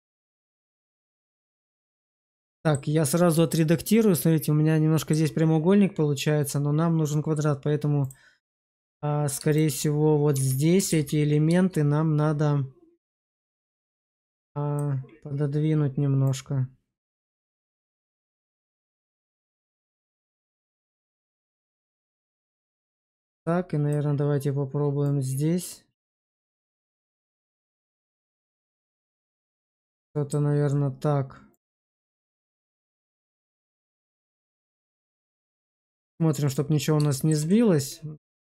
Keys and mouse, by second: 1.7 right click, 2.4 shift+middle drag, 3.4-5.0 shift+middle drag, 7.9 click, 9.4 shift+click, 10.2 Tab, 10.8 shift+z, 13.3 alt+q, 14.1 click, 16.3 click, 22.6 shift+middle click, 23.3 click, 25.0 click, 25.1 click, 29.6 shift+middle click, 31.5 click, 32.9 click, 33.1 click, 34.1 Tab, 34.7 shift+z, 35.1 middle click, 37.0 shift+middle click, 37.4-38.4 middle drag.